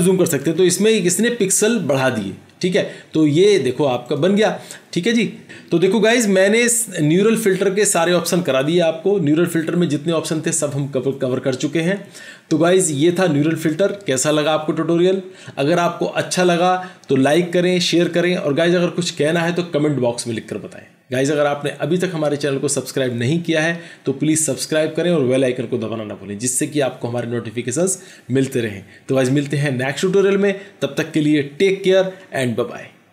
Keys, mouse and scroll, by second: 0.3 ctrl+0.